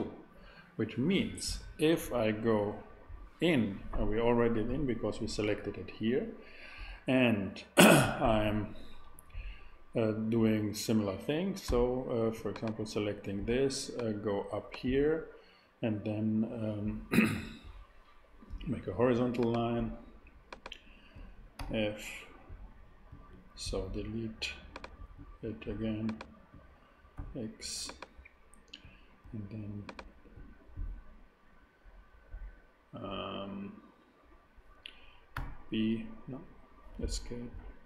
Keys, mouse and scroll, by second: 11.6 a, 11.7 a, 12.3 super+a, 21.6 f, 22.2 f, 27.1 x, 27.6 x, 35.3 b, 37.0 ctrl+z.